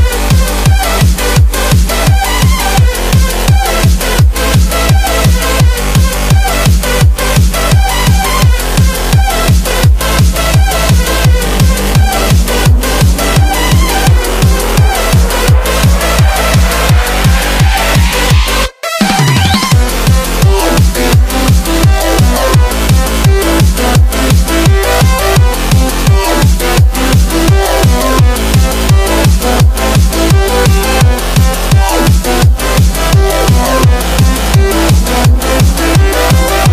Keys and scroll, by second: 26.8 super+z.